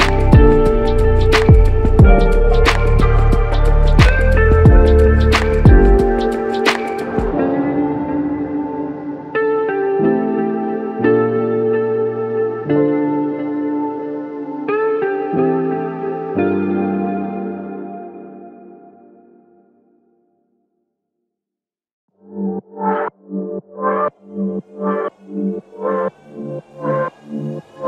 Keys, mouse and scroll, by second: 3.1-3.4 typing, 4.6-5.3 typing, 12.3 double click, 20.9 shift+click.